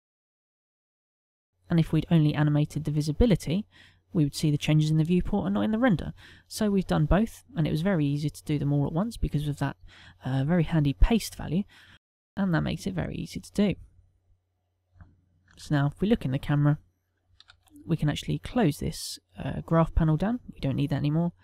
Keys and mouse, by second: 19.9 click.